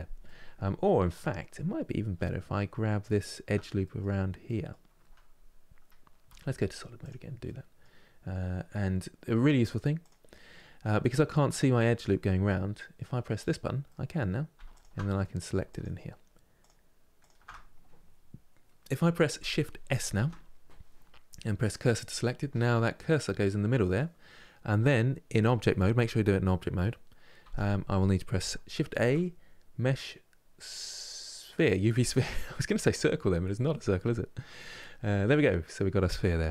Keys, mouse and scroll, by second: 0.0-2.7 middle drag, 2.7 alt+click, 3.5-6.0 middle drag, 6.0 z, 7.1-9.0 middle drag, 9.0-9.7 scroll down 1, 9.7 click, 10.1 scroll up 2, 13.1 click, 13.6 middle click, 14.4 alt+shift+click, 14.8 middle click, 15.4-19.9 alt+shift+drag, 19.9 shift+s, 21.8-24.8 middle drag, 27.1 Tab, 28.6 shift+a, 35.0-36.5 middle drag.